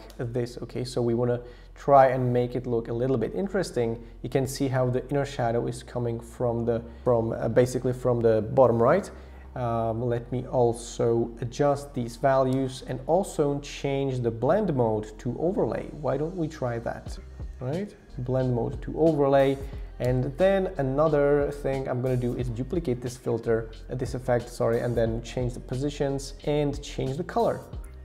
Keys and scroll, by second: 0.1 Return, 9.8 Down, 11.4 Up, 12.5 Return, 17.1 shift+Up, 17.9 shift+Down, 19.4 shift+Up, 19.6 shift+Down, 20.0 Return, 22.9 super+d, 25.2 Up, 25.8 Up, 26.4 Up, 26.9 Up, 27.0 Up, 27.2-28.0 Up.